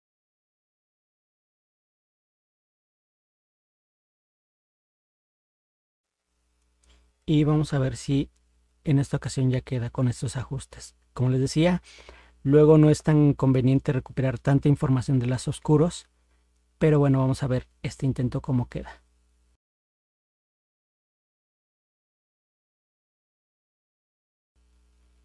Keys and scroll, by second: 7.7 ctrl+0.